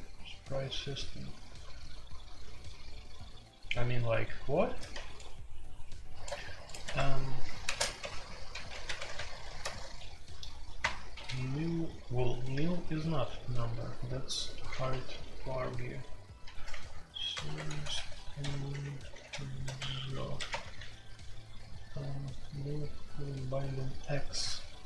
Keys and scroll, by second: 6.8 Escape, 7.6-9.1 typing, 9.6 ctrl+n, 10.8 Return, 13.8-20.3 typing, 20.5 Return.